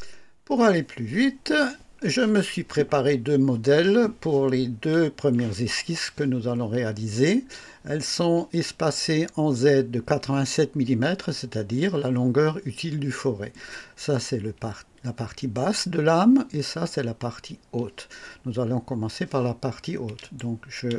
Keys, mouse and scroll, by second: 20.2 click.